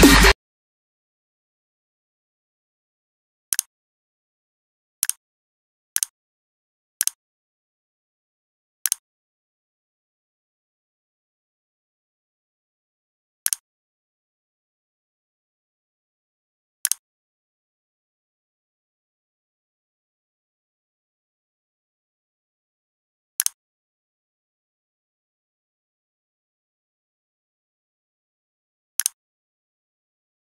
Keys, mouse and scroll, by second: 0.0 click.